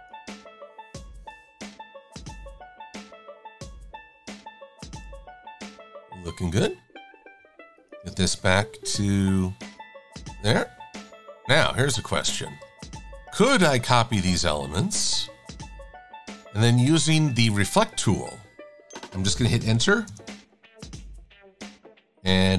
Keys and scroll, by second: 0.3 Delete, 1.8 Delete.